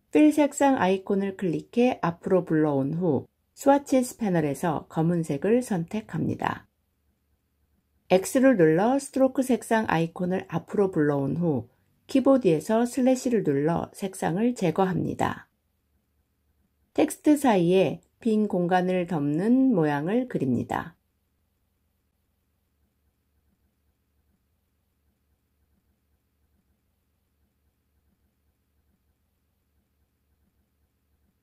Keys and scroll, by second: 8.1 x, 12.9 /.